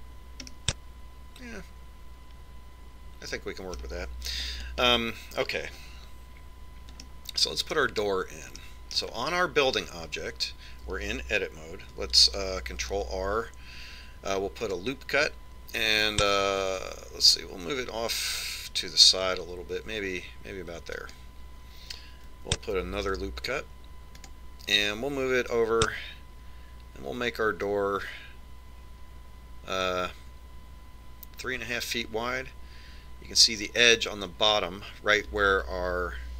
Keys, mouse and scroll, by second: 0.6 click, 1.9-3.6 middle drag, 3.7 middle click, 5.7 KP_1, 6.3-8.3 middle drag, 8.7-12.4 middle drag, 14.3 ctrl+r, 24.5 ctrl+r.